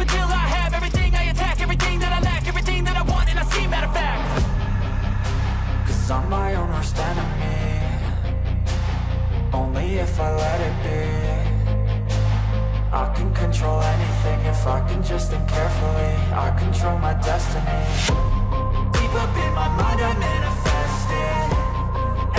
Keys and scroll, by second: 0.9 b, 4.4 e, 6.6 b, 8.9 ctrl+z, 9.9 e, 11.2 ctrl+z, 12.9 ctrl+z, 14.2 e, 15.1 b, 16.4 ctrl+z, 17.4 e, 18.6 ctrl+z, 21.3 ctrl+z.